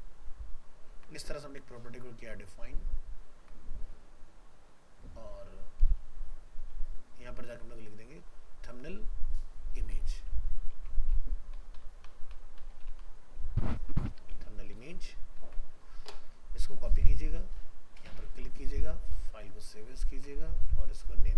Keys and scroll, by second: 0.9 ctrl+s, 15.4 ctrl+s, 17.6 ctrl+c, 19.1 alt+f, 19.2 alt+移, 20.6 ctrl+Tab.